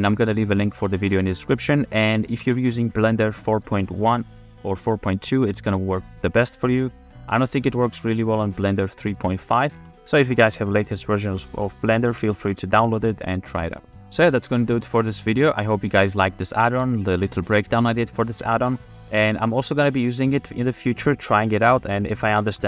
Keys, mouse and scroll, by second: 14.4 shift+f.